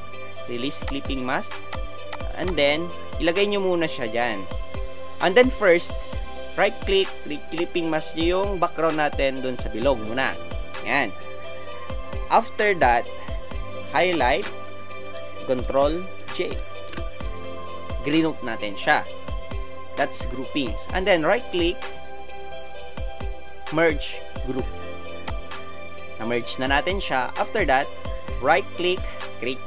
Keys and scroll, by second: 16.8 ctrl+g.